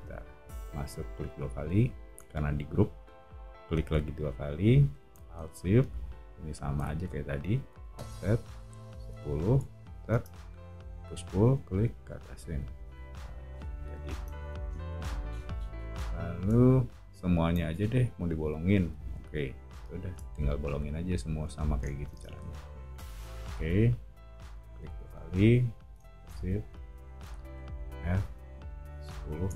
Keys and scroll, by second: 7.7 f, 8.8-10.8 typing, 13.1 o, 14.1 space, 14.3 Escape, 14.5 Escape, 14.9 o, 16.0-16.4 scroll, 22.1 space, 27.5 f, 28.8-29.5 typing.